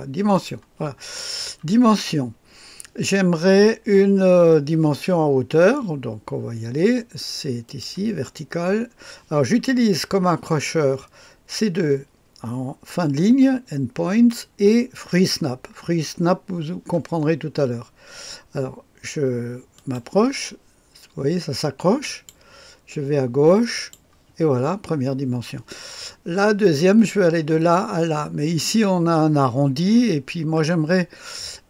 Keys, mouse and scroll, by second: 0.2 click, 7.6 click, 19.7 click, 22.0 click, 23.7 click.